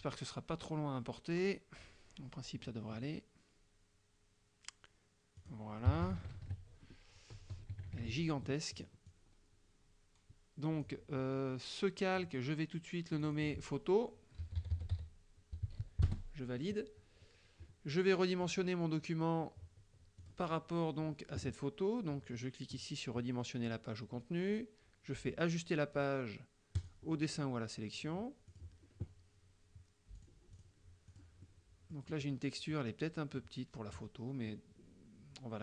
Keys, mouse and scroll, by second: 5.4 click, 5.9 KP_Subtract, 7.8 KP_Subtract, 8.8 click, 13.2 click, 14.2-15.3 typing, 16.1 Return, 18.5 click, 20.3 click, 26.8 click, 28.6 click, 30.3 click, 30.6 click, 31.0 click, 31.4-32.5 middle drag, 33.4 middle click.